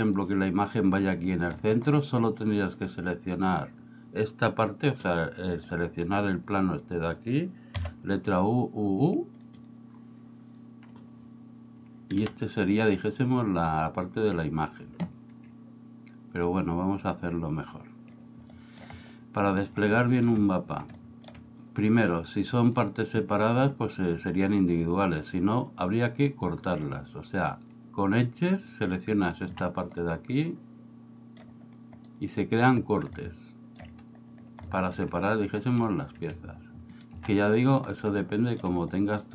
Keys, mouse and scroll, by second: 2.9 click, 3.5 right click, 7.8 u, 12.2 g, 13.7 right click, 17.6 click, 18.7 shift+middle click, 20.0 shift+middle click, 21.1 shift+middle click, 26.8 click, 29.2 alt+right click, 30.1-31.4 middle drag, 32.1 middle click, 33.2 shift+middle click, 34.8 shift+middle click, 35.3 middle click, 37.0 alt+shift+right click, 38.4 shift+middle click, 39.0 middle click.